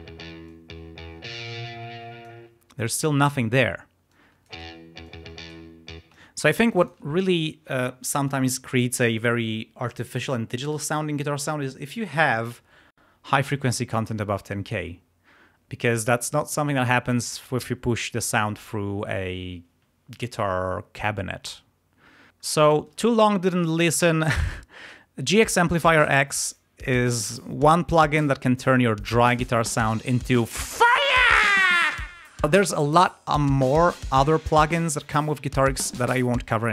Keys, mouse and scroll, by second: 0.5-2.4 drag, 2.5 space, 4.1 click, 4.5 space, 5.1 click, 6.1 click, 6.1 space, 22.3-22.7 scroll up 2, 22.8-23.2 scroll up 2, 23.4-24.6 scroll up 6, 25.2 scroll down 2, 26.0 scroll up 2, 26.9-27.2 scroll down 2, 29.1 scroll up 2, 34.5 scroll down 2, 36.5 scroll up 2.